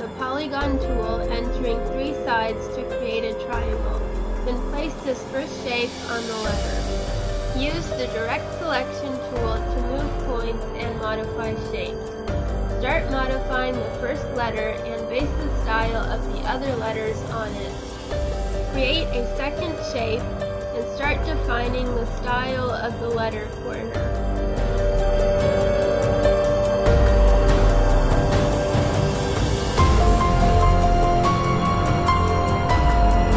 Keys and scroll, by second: 4.8 space, 15.8 ctrl+z, 16.6 space, 21.9 space, 24.1 space, 24.7 space, 27.4 space, 29.6 space.